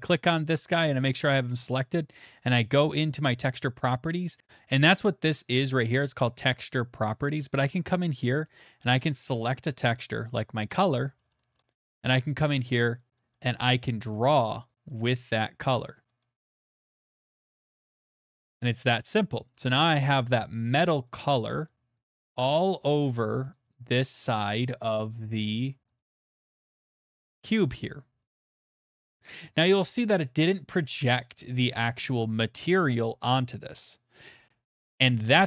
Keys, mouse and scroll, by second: 0.2 click, 2.8 click, 4.4 click, 8.5 click, 10.1 click, 11.2 shift+middle click, 11.5 middle click, 11.7 middle click, 11.7 middle click, 12.6 click, 12.6 shift+middle click, 13.0 click, 13.3 click, 13.9 click, 14.4 click, 14.9 click, 15.4 click, 15.9 click, 16.2 click, 16.5 click, 16.7 click, 16.9 click, 17.1 click, 17.3 click, 17.6 click, 18.0 click, 18.2 click, 18.8-19.3 scroll, 19.5-21.3 scroll, 21.3 click, 21.6 click, 22.0 click, 22.3 click, 22.9 click, 23.2 click, 23.6 click, 23.9 click, 24.1 click, 24.4 click, 24.6 click, 24.8 middle click, 24.8 click, 25.1 click, 25.3 click, 25.5 click, 25.7 click, 26.0 click, 27.0 scroll, 27.5 middle click, 27.8-28.2 shift+middle click, 28.2 middle click, 29.3 middle click, 31.0 middle click, 34.5-35.4 middle drag.